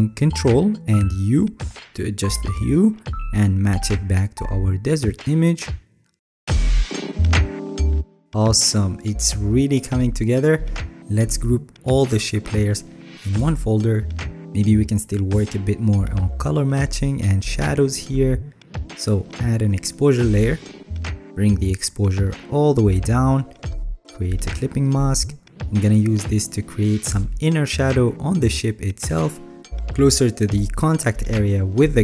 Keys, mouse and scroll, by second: 0.7 ctrl+u, 9.3-9.7 alt+scroll down 3, 9.7-10.2 alt+scroll, 10.6-11.0 alt+scroll down 2, 27.2 ctrl+i.